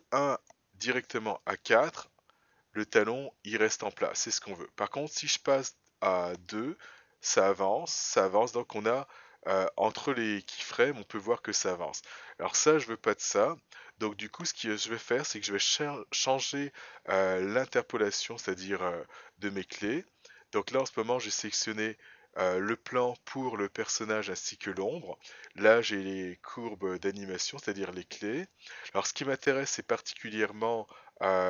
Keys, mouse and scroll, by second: 3.9 click, 5.6 click, 16.1 click, 20.8 shift+click, 30.4-31.4 scroll down 5.